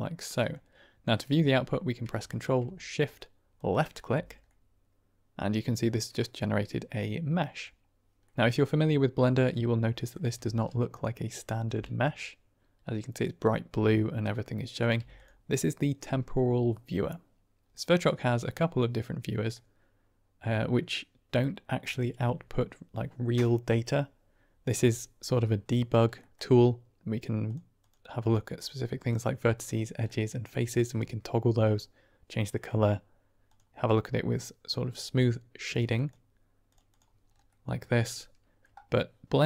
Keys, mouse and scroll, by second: 0.3 middle click, 3.5 ctrl+shift+click, 4.4-5.3 middle drag, 6.3-7.5 middle drag, 8.2 middle click, 9.8 middle click, 10.3 shift+a, 11.7 g, 11.9 click, 14.7 click, 14.9 typing, 17.7 click, 19.4-20.5 middle drag, 26.2 middle click, 27.3 click, 27.7 click, 28.1 click, 28.4 click, 28.9 click, 29.5 click, 30.0 middle drag, 33.4 click, 34.3-34.6 middle drag, 35.6 click, 35.8 click, 36.6 click, 36.8 click, 37.4-38.5 middle drag.